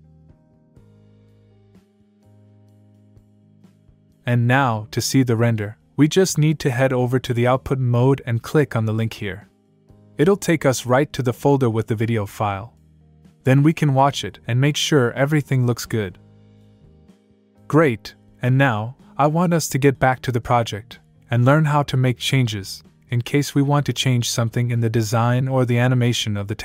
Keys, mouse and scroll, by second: 7.3 click, 10.9 click, 13.1 click, 15.0 click.